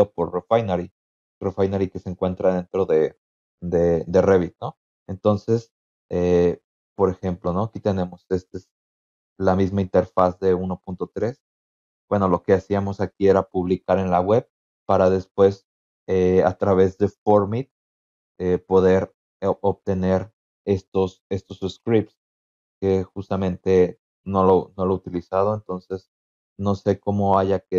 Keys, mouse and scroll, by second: 6.8 click, 10.0 click, 14.7 click, 15.7 click, 20.0 click, 20.2 click.